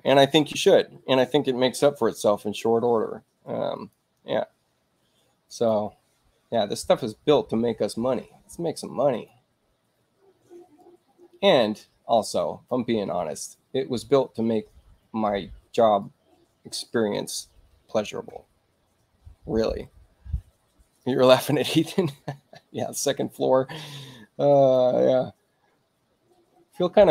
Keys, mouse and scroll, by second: 3.7 click, 5.5 click, 9.1 click, 10.8-12.7 drag, 16.0-17.3 ctrl+drag, 21.0 click, 24.5 click.